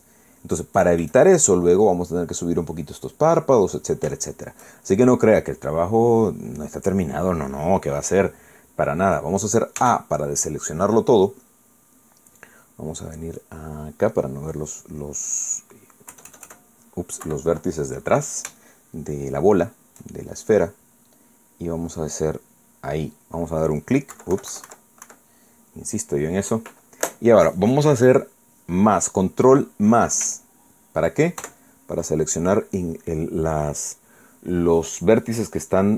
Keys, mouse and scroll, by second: 0.3 middle click, 1.1 shift+middle click, 5.2 shift+middle click, 5.8 shift+middle click, 10.8 a, 14.9 click, 17.1 KP_Add, 18.2 KP_Subtract, 19.6-20.8 shift+middle drag, 23.0 right click, 23.9 scroll up 1, 24.8 click, 25.1 KP_Subtract, 25.6 click, 32.4 ctrl+KP_Add.